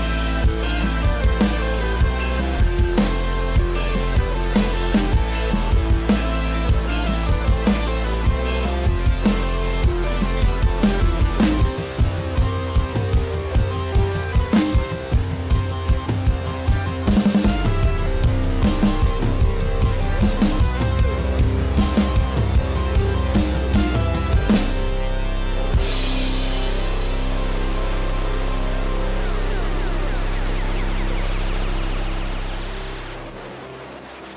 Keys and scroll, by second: 16.8 F3, 18.3 alt+s, 18.4 alt+c, 29.2 alt+s, 29.3 alt+c.